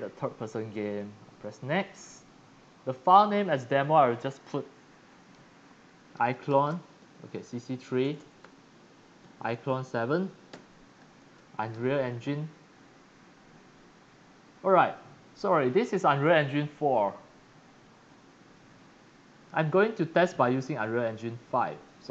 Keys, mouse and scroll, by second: 0.7 click, 3.4 click, 6.1-12.2 typing, 13.9 click, 14.8 click, 15.8 click, 18.0 drag.